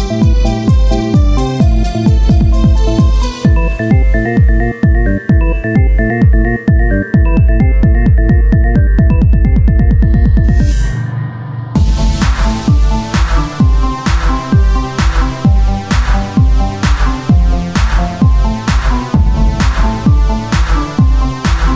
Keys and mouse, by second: 3.8 right click, 4.2 Tab, 5.4 z, 6.6 o, 8.2 click, 8.6-10.0 middle drag, 10.0-13.1 drag, 13.1 Tab, 15.3 KP_1, 16.0 z, 17.9 z, 18.2 click, 20.4 ctrl+z.